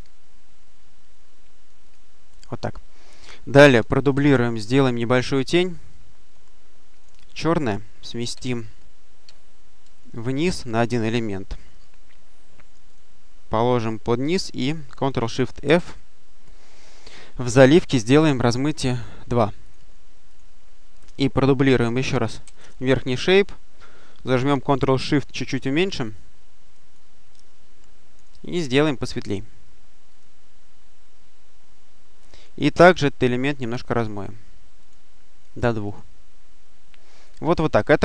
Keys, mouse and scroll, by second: 1.7 click, 4.0 ctrl+d, 5.8-6.6 drag, 6.8 click, 8.2 Down, 9.1 Down, 12.7 click, 15.5 ctrl+shift+f, 17.8 click, 18.3 click, 19.5 click, 20.2 click, 22.3 ctrl+d, 25.7-27.2 ctrl+shift+drag, 28.4-29.5 drag, 30.0 click, 33.9 click, 34.7 click, 35.8 click, 37.9 click.